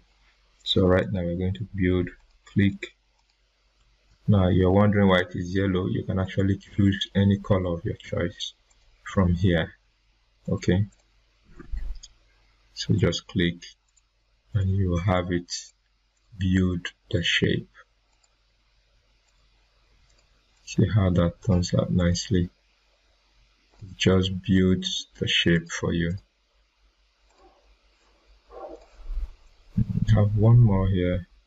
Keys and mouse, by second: 4.0 ctrl+z, 6.2 click, 8.6 click, 16.2 click, 21.6-30.1 drag.